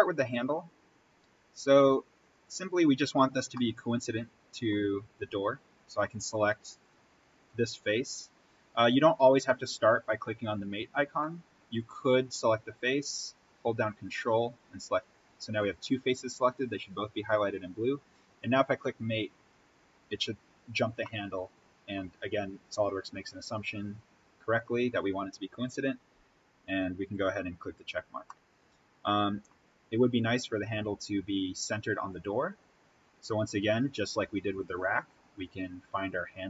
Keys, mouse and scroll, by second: 2.2 click, 3.0-3.5 scroll up 1, 3.5-6.1 middle drag, 6.1-6.8 scroll down 1, 6.8 click, 11.8-13.5 scroll down 1, 14.0 ctrl+click, 18.3 click, 20.8 scroll up 1, 21.0-27.1 middle drag, 27.1 click, 28.0 scroll up 1, 28.2-31.8 middle drag.